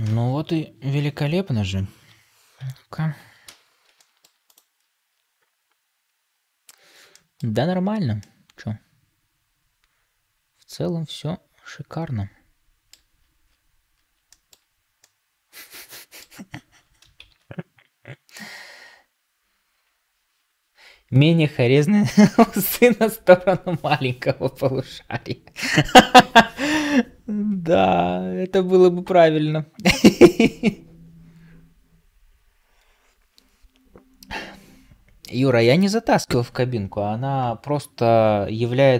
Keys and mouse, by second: 0.0 ctrl+space, 0.0 g, 0.0 s, 0.9 Tab, 2.5 KP_Divide, 3.4 ctrl+space, 3.9 shift+middle drag, 7.0 shift+middle drag, 8.1-12.9 middle drag, 14.2 shift+middle drag, 14.9-16.1 middle drag, 17.1 ctrl+s.